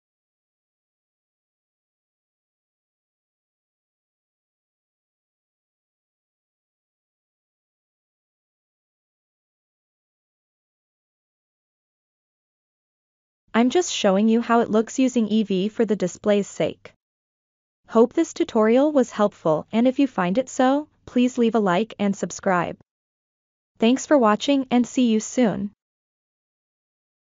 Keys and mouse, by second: 0.4-4.3 middle drag, 4.7-5.6 ctrl+middle drag, 6.7 click, 8.2 middle click, 8.7 middle click, 9.2 Tab, 9.3 a, 9.6 middle click, 10.1 click, 10.7 ctrl+middle click, 11.0 middle click, 11.5 drag, 12.3 drag, 13.1 r, 13.2-15.3 drag, 15.7 g, 15.8 click, 16.5 middle click, 17.0 shift+middle click, 17.2 click, 17.7 middle click, 18.3 shift+middle click, 18.4 click, 18.8 middle click, 19.3 F7, 19.6 click, 19.6 s, 20.4 F7, 20.4 middle click, 21.2 F7, 21.2 click, 21.5 click, 21.9 a, 22.1 drag, 22.1 g, 22.5 middle click, 22.9 F7, 23.0 middle click, 23.3 ctrl+middle click, 24.1 click, 24.9 click, 25.5 middle click, 25.6 middle click, 26.3 ctrl+middle click, 27.1 middle click.